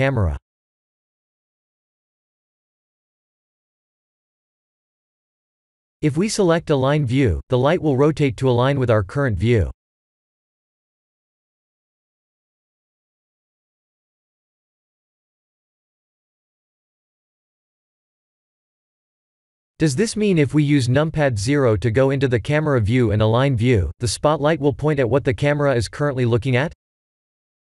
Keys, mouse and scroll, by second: 3.0-3.7 scroll up 1, 3.9 shift+a, 7.3 click, 8.6 click, 9.8 middle click, 15.0 middle click, 18.9 ctrl+z, 20.3 ctrl+z, 20.9 middle click, 22.3-22.7 scroll up 2, 22.9 shift+middle click, 23.5-23.8 scroll up 2, 23.9 shift+middle click, 25.4-25.9 scroll up 2, 26.2 shift+middle click.